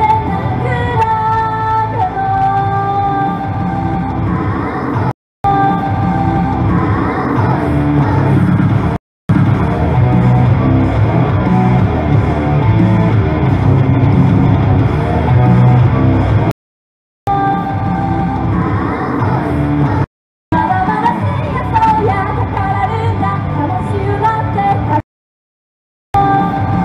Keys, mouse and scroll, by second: 5.1 right click, 5.3 Return, 5.5 space, 9.0 right click, 9.2 Return, 9.3 space, 14.7 right click, 16.1 click, 17.3 space, 20.1 click, 20.6 space, 25.0 right click, 25.9 Return, 26.2 space.